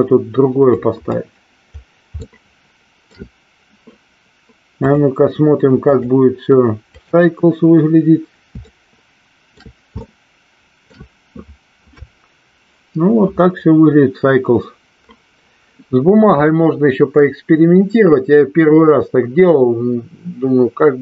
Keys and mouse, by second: 2.5-3.6 shift+middle drag, 6.0-7.3 drag, 9.0 shift+middle click, 10.3 shift+middle click.